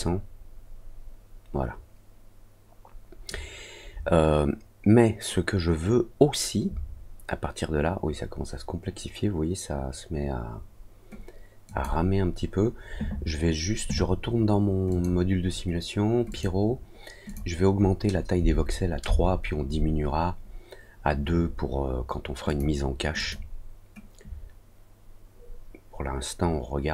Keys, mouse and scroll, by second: 11.6 click, 14.8 click, 16.2 click, 17.2 click, 22.4 click, 23.1 click.